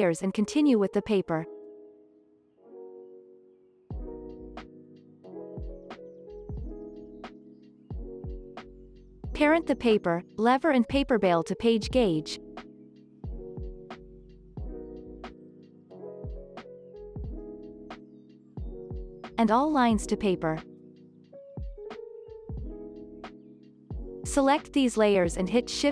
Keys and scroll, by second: 2.6 ctrl+s, 21.6 ctrl+s, 25.1 ctrl+shift+c.